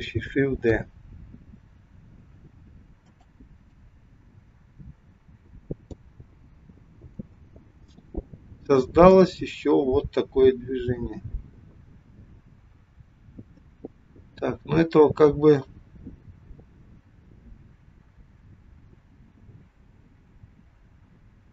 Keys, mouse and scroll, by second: 0.7 shift+d, 3.9 click, 7.0 click, 9.3 click.